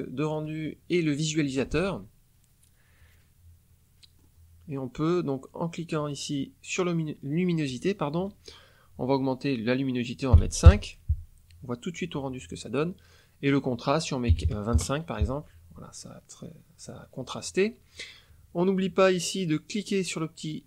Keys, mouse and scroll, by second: 4.1-7.6 middle drag, 4.1-7.6 scroll up 1, 7.6 click, 10.2 KP_5, 10.6 KP_Enter, 13.0 click, 14.2 KP_2, 14.4 KP_5, 14.7 KP_Enter, 15.9-16.2 scroll up 2, 16.3-18.0 scroll down 2, 18.0 middle click.